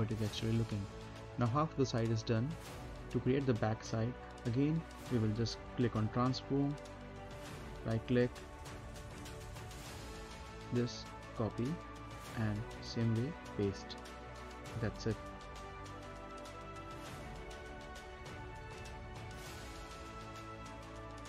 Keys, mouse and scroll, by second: 0.2 right click, 0.8 middle click, 1.3 right click, 1.7 scroll down 1, 2.0-3.4 middle drag, 3.4 space, 4.8 click, 5.7 scroll down 1, 5.9 middle click, 6.2 scroll up 1, 6.5 middle click, 7.0 click, 7.4 right click, 11.1 click, 12.1 right click, 13.0 click, 17.2-17.6 scroll down 1, 18.3 scroll up 1, 18.7 right click, 19.0 middle click, 19.6 scroll up 1, 19.9 right click, 20.2 middle click, 21.0 click.